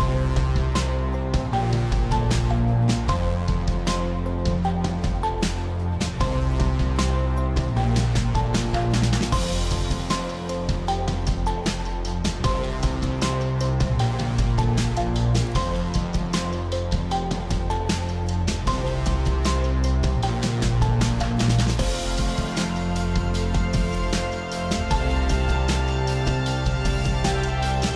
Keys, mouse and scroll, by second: 0.7 click, 2.6 click, 2.9 click, 3.1 click, 3.1 click, 3.9 click, 4.3 click, 4.4 click, 4.6 click, 4.6 click, 4.9 alt+scroll, 5.2 click, 5.5 click, 5.6 click, 5.9-6.4 click, 6.0 click, 6.1 click, 6.2 click, 7.0 click, 7.4 click, 7.5-8.0 click, 7.7 click, 7.7 click, 8.2 click, 8.3 click, 8.4-8.9 alt+scroll, 10.5 alt+scroll, 11.5 shift+click, 13.2 ctrl+g, 14.7 click, 14.7 click, 15.9 shift+click, 15.9-17.0 typing, 18.0 typing, 19.2 click, 20.9 click, 22.6 click, 24.5 alt+click, 25.8 click, 26.4 alt+scroll.